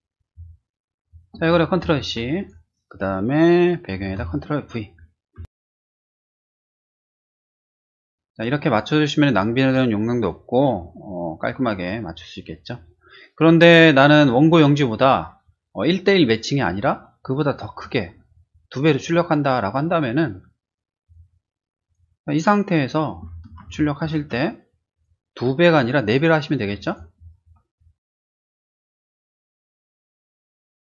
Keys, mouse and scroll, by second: 1.0 click, 1.8 ctrl+c, 2.4 click, 4.2 ctrl+v, 5.9 ctrl+t, 6.0 click, 7.6 Return, 21.0 click, 21.9 click, 23.7 ctrl+shift+z, 23.7 ctrl+shift+a, 24.9 click, 26.7 click, 28.9-30.1 typing, 30.7 click.